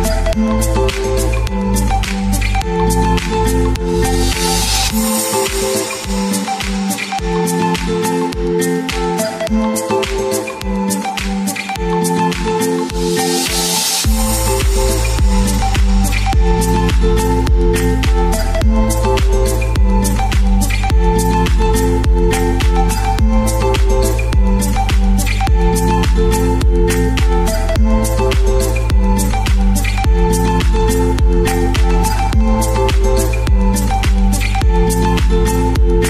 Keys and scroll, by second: 3.7 super+d, 15.2 typing, 17.2-21.3 typing, 35.2 1, 35.6 Return.